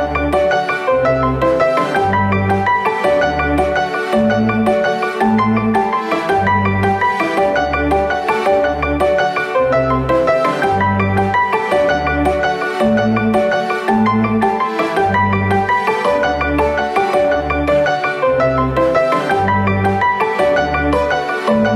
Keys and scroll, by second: 1.2 p, 7.0 r, 9.4 space, 11.4 super+r, 20.8 space.